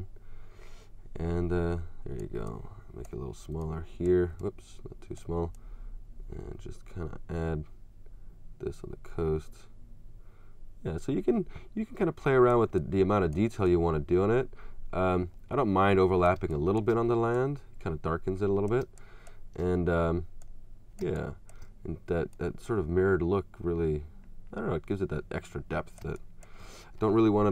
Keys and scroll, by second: 16.4 space, 18.8 space, 21.0 space, 26.0 space.